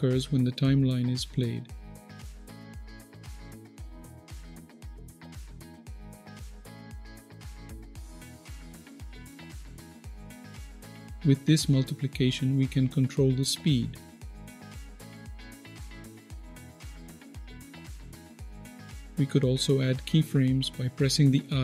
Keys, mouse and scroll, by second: 1.3 click, 10.5 click, 11.6-17.3 drag, 18.4 click, 21.5 i.